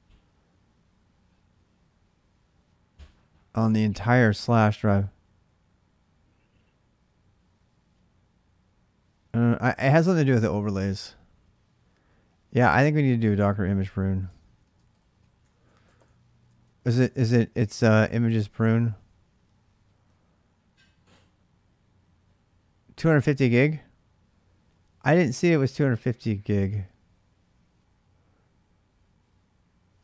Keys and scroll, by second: 12.5 typing, 13.6-19.3 typing, 16.3 Tab.